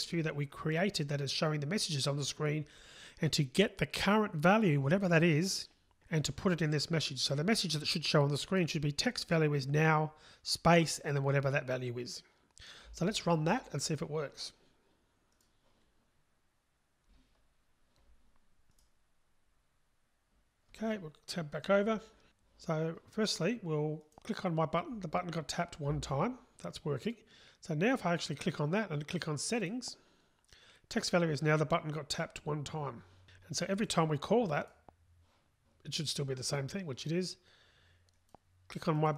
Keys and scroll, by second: 15.5 ctrl+shift+r, 19.2 ctrl+shift+r.